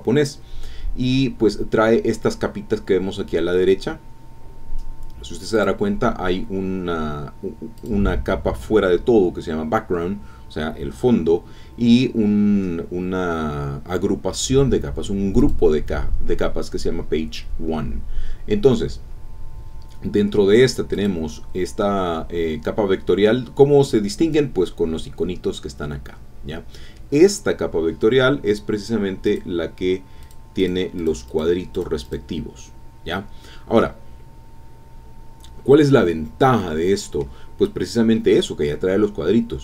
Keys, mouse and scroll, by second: 1.7-2.0 scroll down 1, 2.0-2.4 scroll up 2, 2.4 scroll down 2, 2.5 scroll up 2, 5.5 click, 7.8 click, 15.4 click, 18.5-18.9 scroll down 1, 19.5 scroll up 1, 20.1 scroll down 1, 20.9 click, 29.2 click, 30.2 click, 30.6 click, 31.0 click, 31.7 click, 32.0 click, 35.1 click, 35.5 scroll down 2, 36.1 scroll up 2, 36.6 middle click.